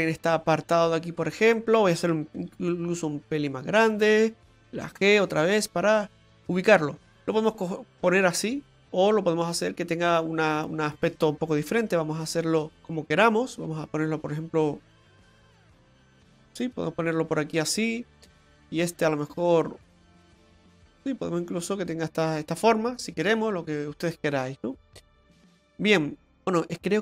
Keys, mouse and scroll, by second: 2.4 s, 4.7 g, 11.9 Tab, 12.2 right click, 12.6 right click, 12.6 click, 12.8 click, 18.2 right click, 19.2 right click, 21.2 click, 25.5 right click, 26.5-27.0 scroll up 3.